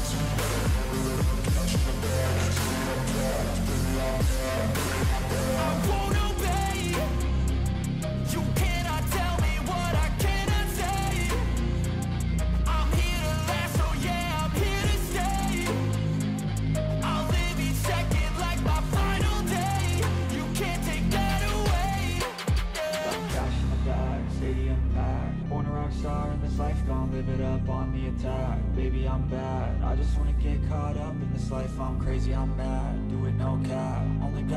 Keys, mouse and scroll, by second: 0.0-4.7 typing, 18.7-19.6 scroll down 12, 19.9-21.4 scroll up 17, 28.2 right click.